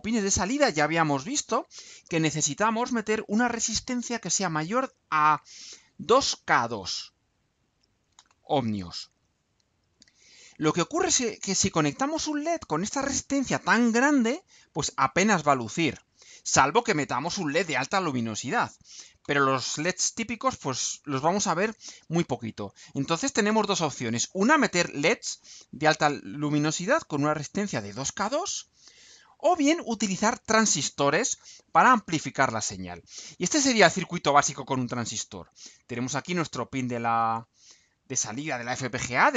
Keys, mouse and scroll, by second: 8.9 scroll down 2, 28.9-29.4 scroll down 2, 30.7-31.5 scroll down 2, 32.3-32.7 scroll down 2, 32.8-33.7 scroll down 6, 36.2 scroll down 2.